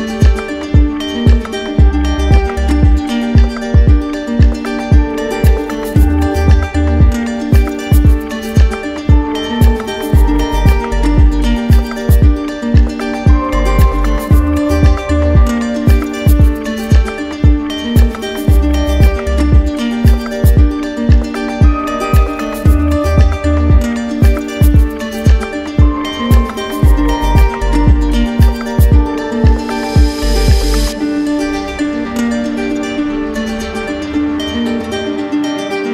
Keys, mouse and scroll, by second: 0.1 right click, 1.1 right click, 3.1 right click, 3.5 right click, 4.0 right click, 5.4 click, 6.6 click, 8.2 right click, 9.6 right click, 10.7-11.8 drag, 12.8 right click, 13.8 click, 14.5 right click, 15.0 alt+right click, 15.6 right click, 18.9 click, 19.6 click, 20.4 right click, 21.8 click, 22.6 right click, 23.7 click, 25.5 click, 26.2 click, 27.0 click, 27.8 click, 28.5 click, 29.2 alt+right click, 29.7 right click, 30.4 right click, 30.5 alt+right click, 31.0 alt+right click, 31.6 right click, 33.3 click, 33.9 right click, 34.1 ctrl+z, 35.4 click.